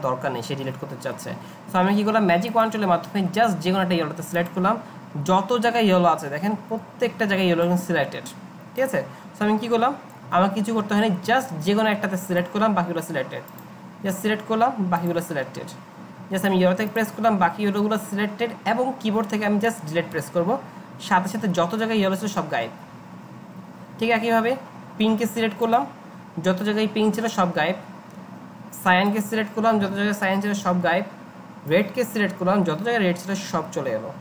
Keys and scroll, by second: 20.1 Delete, 27.1 Delete, 30.6 Delete, 33.6 Delete.